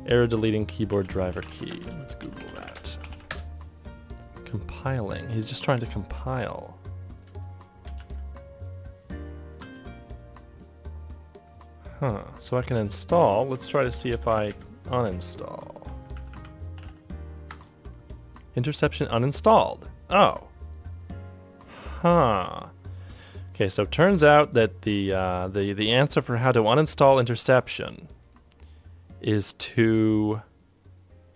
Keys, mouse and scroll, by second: 0.0-3.5 typing, 3.8 ctrl+Tab, 3.8 ctrl+click, 22.8-23.6 typing.